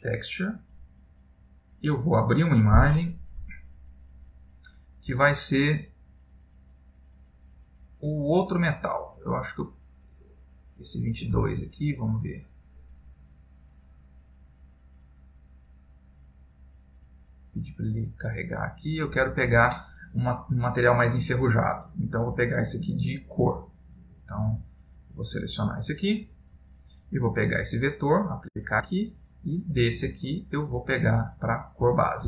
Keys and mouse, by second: 2.1 click, 27.7 click, 30.4 click.